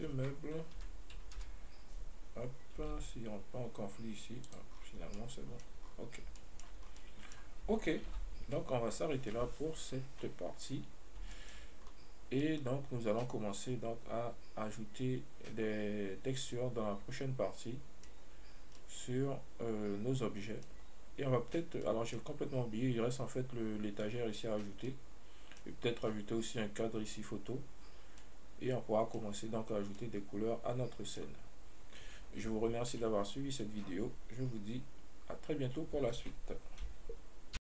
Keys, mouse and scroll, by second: 1.0 KP_7, 1.6 KP_Decimal, 3.1 g, 6.6-7.1 middle drag, 7.3-21.9 middle drag, 22.1-30.1 middle drag, 30.4-37.8 middle drag.